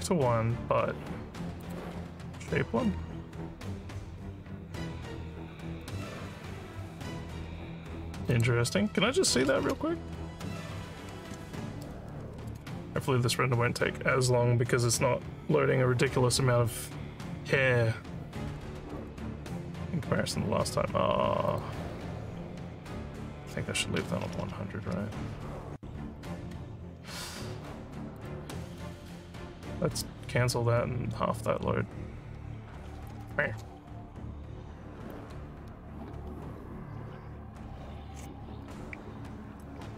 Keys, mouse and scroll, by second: 1.6 click, 8.3 click, 11.2 ctrl+s, 19.0 click, 20.1 scroll down 1, 20.1 scroll down 1, 21.5 click, 28.2 click, 29.9 click.